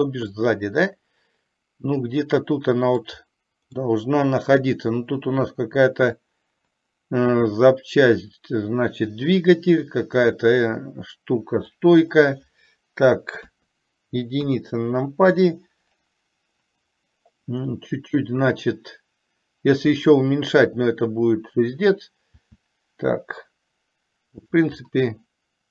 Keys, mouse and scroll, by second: 0.5-3.4 middle drag, 3.9-11.8 middle drag, 13.7 KP_3, 14.8 KP_1, 22.4 s, 24.9-25.7 middle drag.